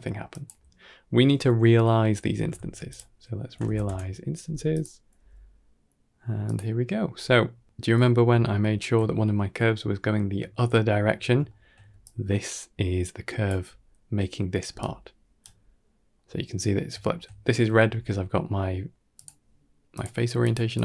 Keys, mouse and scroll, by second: 0.2 g, 0.6 middle click, 1.0-1.9 scroll up 3, 2.4 shift+a, 5.0 g, 6.8 shift+middle drag, 7.5-8.0 middle drag, 8.3-8.6 shift+middle drag, 10.4-10.7 shift+middle drag, 11.0 scroll up 2, 11.3 shift+middle drag, 11.7 d, 11.9-13.3 drag, 13.3 d, 13.4 d, 13.5 d, 14.5 d, 14.7 right click, 15.7 middle drag, 16.1 scroll down 1, 16.8 shift+middle drag, 18.4-18.7 scroll down 4, 18.7 scroll up 1, 19.0-20.6 drag.